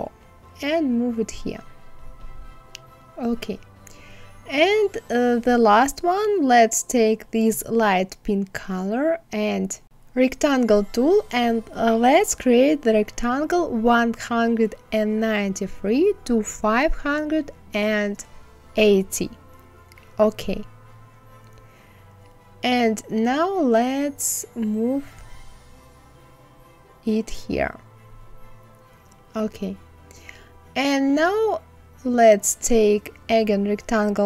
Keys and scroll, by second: 12.5 KP_1, 12.8 KP_9, 13.2 KP_3, 16.1 KP_5, 17.6 KP_8, 17.9 KP_0.